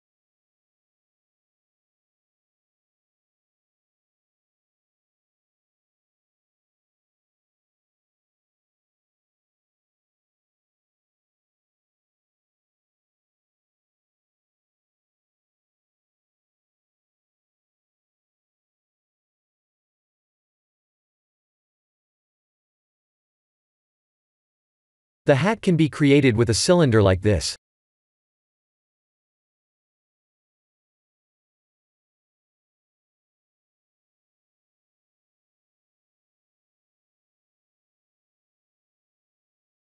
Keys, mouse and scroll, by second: 0.4 KP_1, 0.7 shift+z, 1.3 click, 2.7-3.4 scroll down 3, 3.4-3.9 scroll down 1, 6.2-6.9 scroll up 2, 6.9 click, 7.3 shift+click, 8.0 KP_7, 11.7 shift+d, 15.4 r, 17.7 g, 20.1 r, 21.3 KP_3, 21.7 KP_1, 22.7 click, 23.7-24.3 scroll down 2, 25.0 click, 25.7 shift+a, 29.5 s, 31.4 Tab, 31.7 middle click, 32.3 3, 32.8 click, 33.8 click, 35.2 e, 35.5 s, 38.4 e, 39.4 Tab.